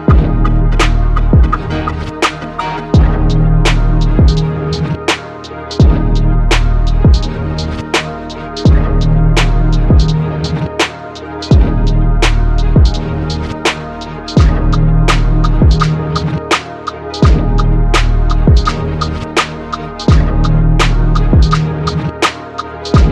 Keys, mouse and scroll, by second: 6.5 shift+right click, 10.8 e, 15.0 ctrl+r, 21.0 ctrl+super+r.